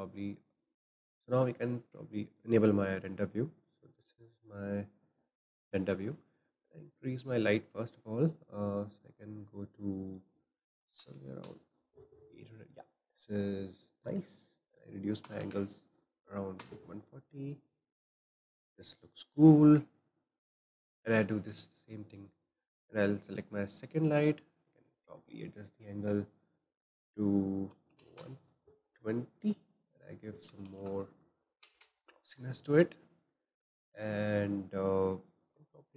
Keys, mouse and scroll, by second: 0.1-3.7 shift+middle drag, 3.7 click, 6.3-6.9 scroll up 1, 6.9-8.9 shift+middle drag, 8.9-11.1 drag, 11.1 KP_0, 14.6-17.8 drag, 20.3 click, 21.3-23.2 middle drag, 23.2 drag, 23.9 click, 24.7-27.1 middle drag, 27.1-31.0 drag, 31.0 KP_0.